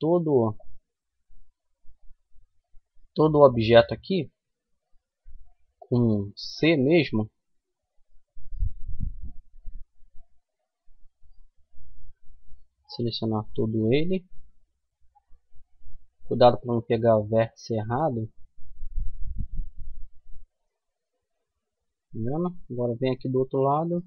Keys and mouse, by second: 0.4-3.6 middle drag, 0.4 a, 2.1 c, 20.2 middle click, 21.9-23.9 middle drag, 23.4 c.